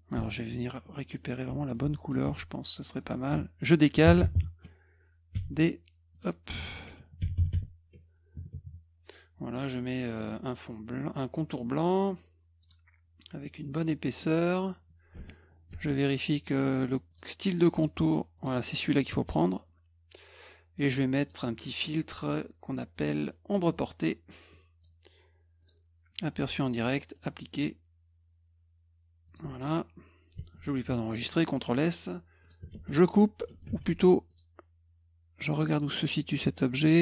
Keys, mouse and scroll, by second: 0.4 middle click, 0.4 scroll up 2, 0.5 middle click, 0.9 middle click, 1.8 click, 2.3 ctrl+z, 6.2 click, 6.6 F1, 11.4 middle click, 12.6 right click, 13.8 click, 15.7 ctrl+shift+f, 17.1 click, 17.9 click, 18.4 click, 21.2 click, 23.6 click, 24.5 click, 25.6 click, 27.2 click, 29.3 click, 30.7 ctrl+s, 32.4 click, 32.7 ctrl+x, 33.7 ctrl+z, 34.3 click, 35.5 click, 36.6 click.